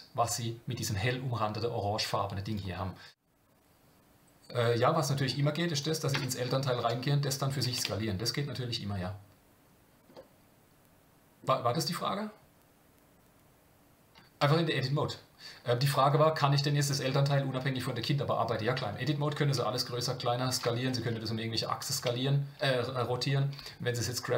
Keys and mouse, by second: 6.1 Tab, 6.8 s, 7.8 Tab, 10.1-11.4 middle drag, 14.4 Tab, 19.0 middle click, 20.8 r, 22.0 Tab, 23.6 g.